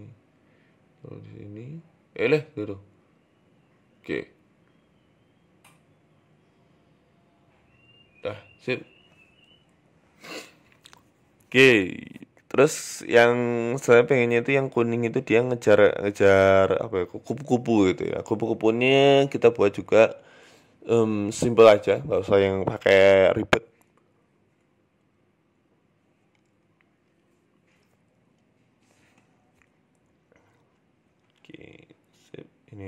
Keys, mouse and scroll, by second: 0.3 g, 1.6 right click, 2.4 ctrl+z, 2.7 right click, 3.7 KP_7, 4.4 g, 5.4 right click, 5.8 right click, 6.1 shift+right click, 6.5 g, 7.3 middle click, 7.7-8.2 scroll down 3, 8.5 middle click, 9.0-9.3 scroll up 2, 9.4-9.9 scroll down 2, 9.9 right click, 10.1-10.5 scroll up 4, 10.5-11.0 scroll down 1, 11.0-11.4 scroll down 3, 11.4 scroll up 1, 11.4 KP_1, 11.9 shift+middle click, 12.1 shift+a, 14.5-15.1 scroll down 3, 15.1-15.8 scroll down 2, 15.1 g, 15.8 shift+middle click, 16.5 s, 17.4-17.9 scroll up 6, 17.9 s, 19.9-21.0 scroll down 3, 21.0 click, 22.0 click, 24.2 click, 24.4 click, 25.3-25.9 scroll up 4, 25.5 shift+middle click, 25.9 Tab, 26.2 shift+middle click, 26.7 ctrl+r, 27.9 ctrl+r, 28.6 click, 29.0 s, 29.7 click, 30.0 s, 30.6 click, 30.9 s, 31.8 click, 32.1 s.